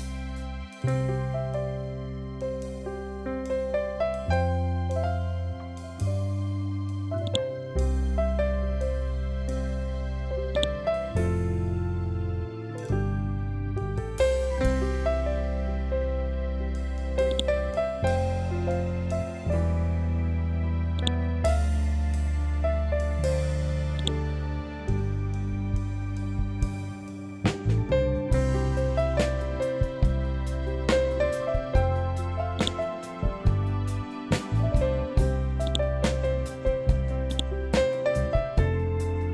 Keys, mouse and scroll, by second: 6.7-10.0 drag, 10.0 ctrl+click, 16.8 click, 20.4 click, 23.5-32.0 drag, 35.1-39.3 drag.